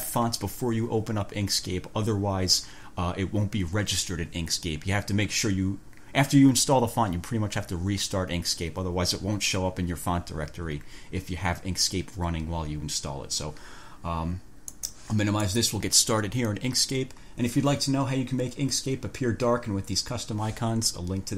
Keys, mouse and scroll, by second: 14.9 click, 15.7 click.